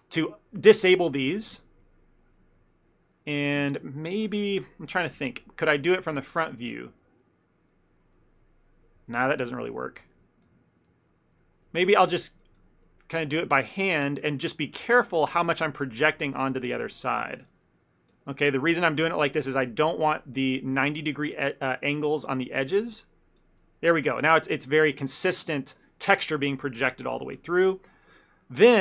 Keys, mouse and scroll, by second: 1.6 ctrl+middle click, 1.9 middle click, 3.6 KP_3, 5.2 KP_1, 6.1 f, 6.6 click, 6.8 click, 7.3 click, 7.5 click, 7.8 click, 8.2 middle click, 9.0 middle click, 9.4 ctrl+z, 9.6 ctrl+middle click, 9.7 ctrl+middle click, 10.0 ctrl+z, 10.3 ctrl+z, 10.8 ctrl+z, 11.2 ctrl+z, 11.4 middle click, 11.7 f, 12.0 middle click, 12.5 click, 12.6 click, 12.9 middle click, 13.3 click, 13.6 middle click, 14.0 click, 14.3 click, 14.5 middle click, 14.7 middle click, 14.9 ctrl+middle click, 15.0 ctrl+middle click, 15.1 middle click, 15.5 middle click, 15.9 middle click, 15.9 ctrl+middle click, 16.3 click, 16.5 click, 16.6 click, 16.7 click, 16.9 click, 17.3 click, 17.6 click, 17.7 middle click, 18.2 click, 18.4 middle click, 18.7 middle click, 19.1 click, 19.3 middle click, 19.8 click, 20.0 click, 20.5 middle click, 20.9 click, 21.2 click, 21.4 click, 21.7 middle click, 22.0 middle click, 22.3 click, 22.8 click, 23.0 middle click, 23.5 click, 23.7 click, 24.0 middle click, 24.5 click, 24.6 click, 24.8 click, 25.1 ctrl+middle click, 25.3 middle click, 25.6 middle click.